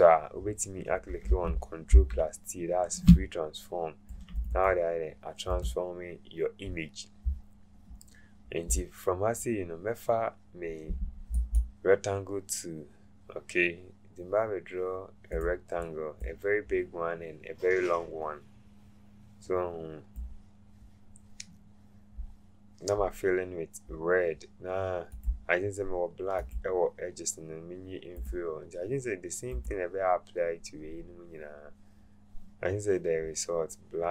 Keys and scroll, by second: 1.9 ctrl+t.